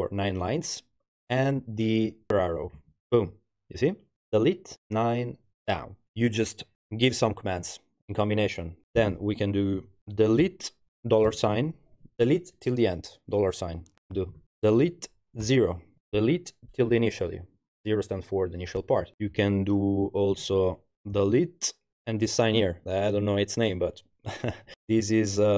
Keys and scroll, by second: 2.8 Page_Down, 10.5 d, 11.3 shift+4, 14.3 u, 14.8 d, 15.4 0, 21.2 d, 21.9 shift+ì.